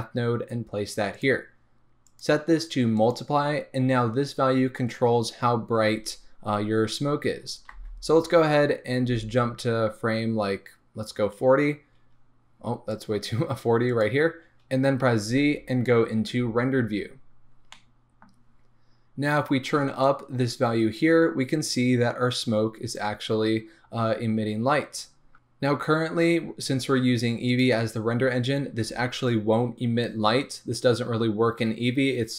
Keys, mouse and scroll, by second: 1.2-2.5 middle drag, 1.2 shift+a, 2.5-17.8 drag, 7.7 space, 9.4 space, 16.5 z, 17.8-20.2 middle drag, 18.6-20.2 scroll up 2, 20.2-32.3 drag.